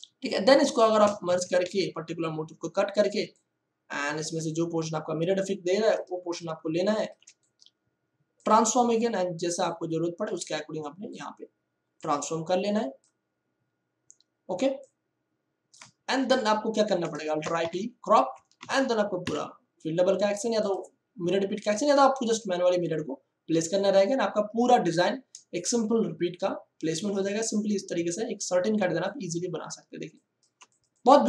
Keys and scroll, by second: 0.3 ctrl+space, 1.2 ctrl+e, 2.5 m, 6.1 ctrl+space, 16.1 Return, 17.4 alt+i, 17.6 alt+p, 18.5 ctrl+d, 19.2 F1, 28.7 ctrl+space, 29.5 ctrl+space, 29.9 ctrl+space, 30.4 ctrl+space.